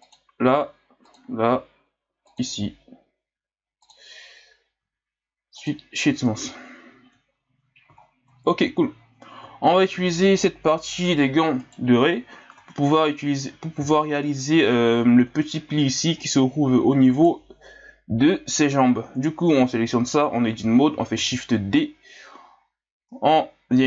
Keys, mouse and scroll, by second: 1.2-4.8 drag, 4.8 w, 6.3 a, 6.7-7.3 scroll down 2, 7.3-8.0 scroll down 3, 8.0 scroll down 6, 8.7-9.1 scroll down 1, 9.1-9.5 scroll up 1, 9.6 scroll up 1, 11.6 right click, 12.6 Tab, 14.0-14.5 scroll down 1, 14.5-14.9 scroll up 1, 17.1 right click, 18.2 l, 21.1 shift+d.